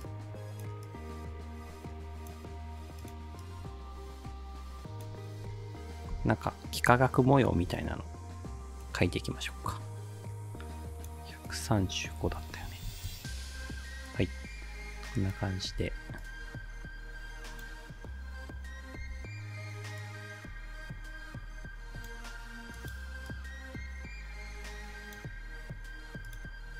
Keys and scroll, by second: 6.1 ctrl+d, 7.7 r, 12.0-13.4 typing, 15.8 ctrl+d, 19.0 r.